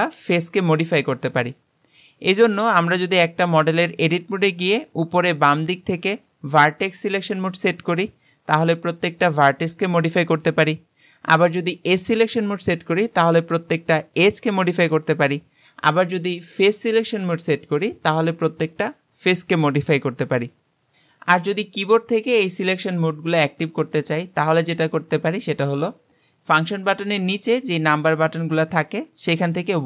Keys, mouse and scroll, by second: 0.1 click, 3.4-6.5 drag, 6.7 click, 8.6 click, 9.4 g, 11.8 click, 13.5 click, 14.0 g, 16.5 click, 18.1 click, 18.5 g.